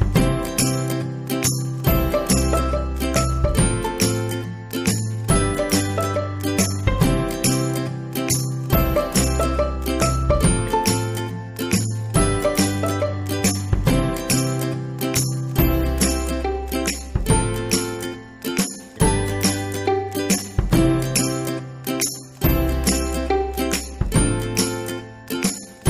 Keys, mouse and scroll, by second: 1.1 ctrl+z, 1.7-4.8 drag, 15.1 click, 21.9 click.